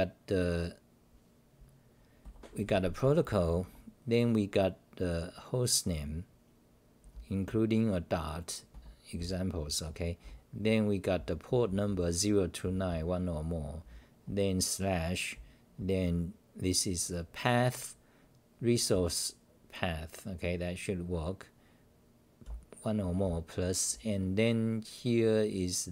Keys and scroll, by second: 2.2-3.5 typing, 7.1 h, 8.5-14.5 typing, 18.7-19.4 typing, 22.4 n, 23.5 n, 24.5 n.